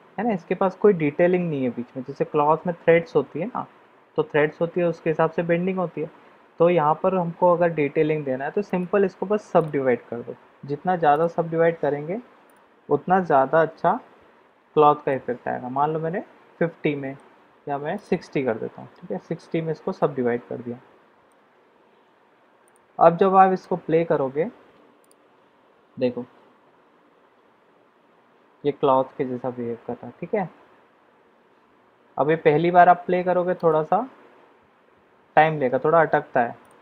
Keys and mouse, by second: 8.6-9.6 drag, 11.2 click, 12.4-14.6 drag, 15.1-17.2 middle drag, 17.9-19.7 drag, 20.1-21.3 middle drag, 22.1 Tab, 23.0-23.6 middle drag, 25.0 click, 33.8 click, 36.6 click.